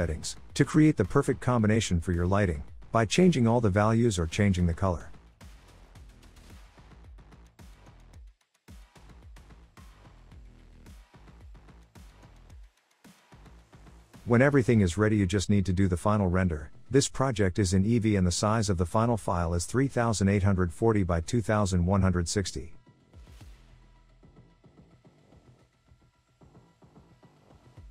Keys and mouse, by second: 0.4-3.0 drag, 25.0-27.9 drag.